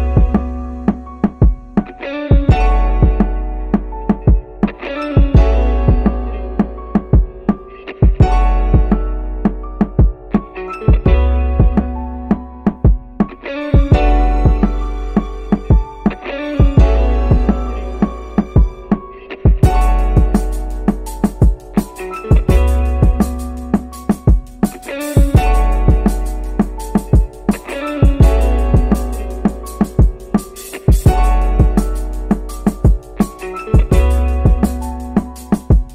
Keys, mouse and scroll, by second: 1.0 space, 5.4 middle click, 5.6 middle click, 6.5-7.2 scroll down 4, 7.2 middle click, 8.8-11.0 drag, 11.4 middle click, 12.0-12.4 scroll up 2, 12.4 middle click, 13.8 click, 15.9 r, 21.5 click, 23.2 click, 25.1-25.5 scroll up 2, 27.2 click, 29.6-34.3 right drag, 35.7-35.9 scroll down 2.